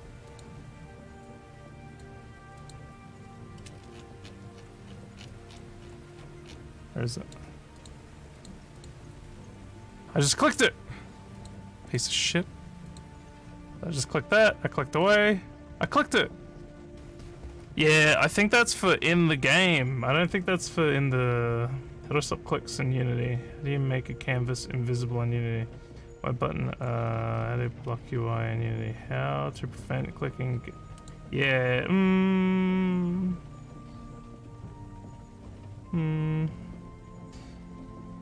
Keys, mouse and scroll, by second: 0.3 click, 1.9 click, 2.6 click, 3.9 alt+scroll up 4, 4.3 alt+scroll, 4.9-5.6 alt+scroll, 6.5 scroll, 6.9 alt+click, 7.8 click, 8.4 click, 8.8 click, 11.4 click, 11.9 click, 12.9 click, 14.3 click, 15.0 click, 20.6 scroll up 1, 27.4 scroll down 2, 27.8 scroll up 2, 31.0 click, 35.3 scroll up 1.